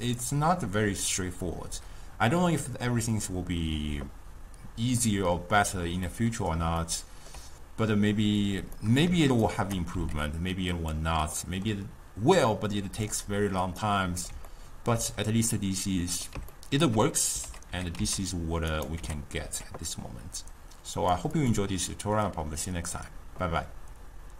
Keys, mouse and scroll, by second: 0.0 click, 5.0-8.0 middle drag, 8.0 click, 8.8 middle click, 9.5 shift+right click, 10.0 g, 11.4-12.4 middle drag, 12.4 click, 13.9-16.5 middle drag, 16.5-17.2 scroll down 2, 17.2 ctrl+middle click, 17.7 g, 19.0 g, 21.4 click.